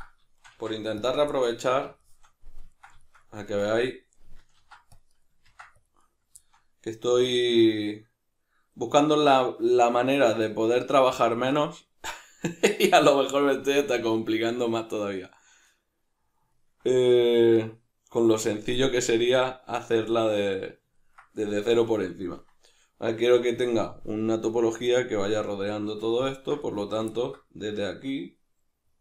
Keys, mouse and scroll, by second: 0.4 shift+right click, 0.6 x, 1.3-29.0 middle drag, 4.6 ctrl+r, 5.3 right click, 5.5 ctrl+r, 6.1 right click.